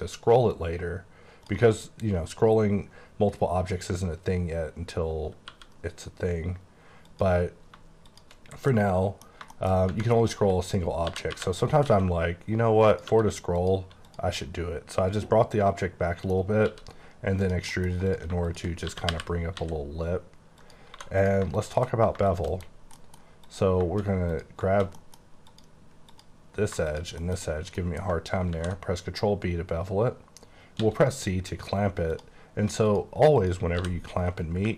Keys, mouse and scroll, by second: 5.5 e, 7.0 click, 8.1 shift+click, 8.4 scroll down 3, 8.7 middle click, 9.9 Tab, 10.1 middle click, 10.4-11.8 typing, 10.6 click, 12.9 click, 13.1 e, 13.6 click, 14.0 click, 14.4 middle click, 16.6 e, 17.4 click, 17.7 middle click, 18.1 click, 18.8-19.6 typing, 20.6 click, 20.9 2, 21.2 click, 22.5 shift+KP_Decimal, 22.9 middle click, 23.4 click, 24.3 click, 24.9 middle click, 25.5 click, 26.1 click, 27.2 shift+middle click, 27.4 shift+middle click, 27.8 scroll up 3, 28.5 ctrl+b, 29.4-30.2 scroll up 4, 30.8 c, 31.1-32.1 scroll up 6, 32.1 click, 32.9 click, 33.5 click, 33.7 g, 34.3 right click.